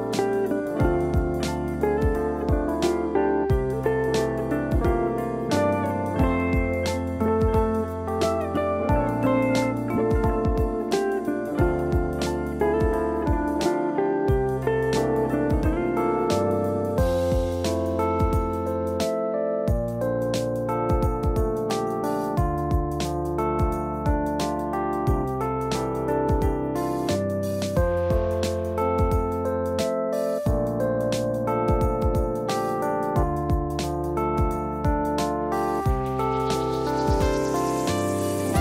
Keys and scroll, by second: 0.3 Delete.